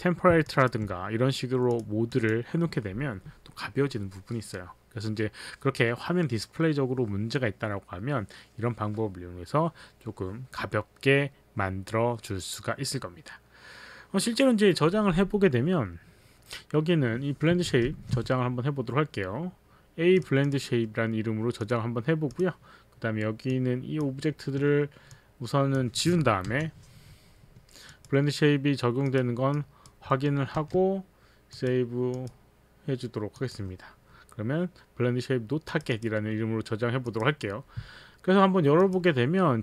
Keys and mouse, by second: 0.5 alt+click, 1.7 click, 2.1 click, 17.9 ctrl+shift+s, 20.2 click, 20.4 click, 21.6 click, 22.3 click, 23.5 click, 25.1 click, 26.5 Delete, 27.9 click, 29.0 click, 29.6 click, 30.1 middle click, 30.6 z, 32.1 click, 33.4 click, 35.7 click, 36.6 click, 37.0 click, 38.8 click.